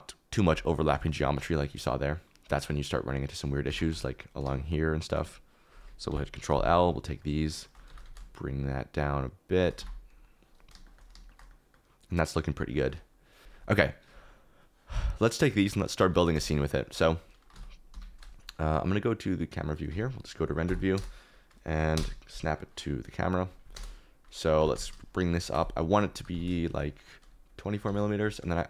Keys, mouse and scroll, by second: 1.3 shift+middle click, 2.0 KP_Decimal, 3.7 Tab, 4.0 3, 4.8 shift+right click, 6.1 ctrl+l, 6.7 KP_Decimal, 7.2 middle click, 7.9 g, 8.0 z, 9.5 shift+click, 9.8 Tab, 10.7 shift+middle click, 11.1 shift+middle click, 13.5 ctrl+s, 15.8 middle click, 16.3 z, 16.6 middle click, 17.5 ctrl+s, 17.9 Escape, 19.5 click, 19.8 z, 20.6 Right, 21.9 KP_0, 23.7 KP_0, 24.5 g, 24.7 z, 26.1 g, 26.3 z.